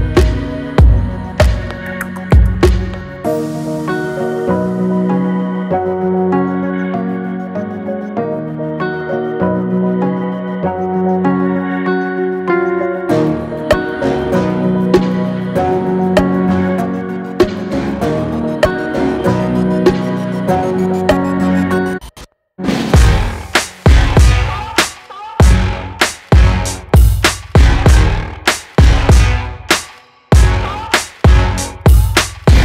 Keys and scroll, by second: 1.2 ctrl+t, 14.7 ctrl+t, 20.4 ctrl+t.